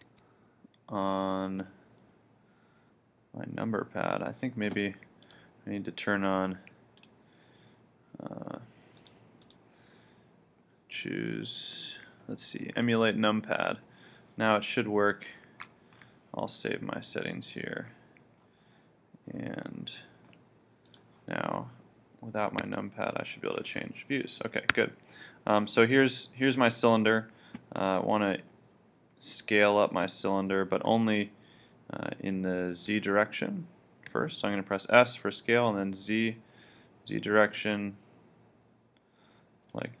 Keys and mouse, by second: 0.1 1, 2.0 middle click, 5.3-7.3 drag, 22.6 KP_1, 23.7 KP_3, 24.7 KP_1, 32.9 s, 39.8-40.0 drag.